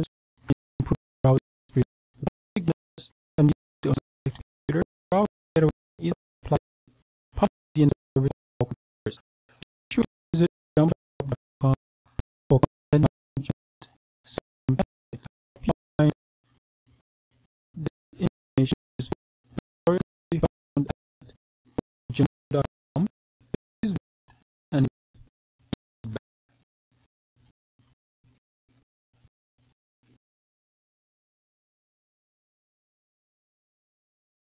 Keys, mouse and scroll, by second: 1.5-2.6 scroll down 2, 9.6 click, 14.3-15.1 scroll down 2, 18.5-19.5 scroll down 1, 19.8-20.8 scroll down 2, 22.3-23.0 scroll down 2, 25.6 click, 27.1-28.0 scroll down 2, 28.8-29.5 scroll down 2, 29.5-32.8 scroll up 2, 34.0 click.